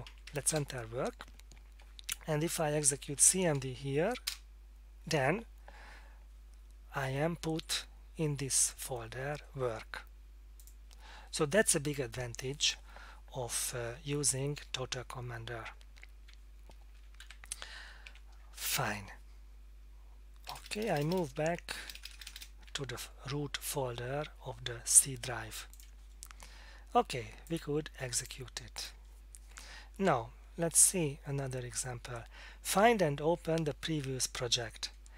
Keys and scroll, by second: 0.1 Down, 0.3 Down, 0.5 Return, 2.6-3.7 typing, 4.3 Return, 16.8 alt+F2, 17.2 typing, 18.0 Tab, 19.7-22.3 typing, 21.4 Tab, 22.7 Tab.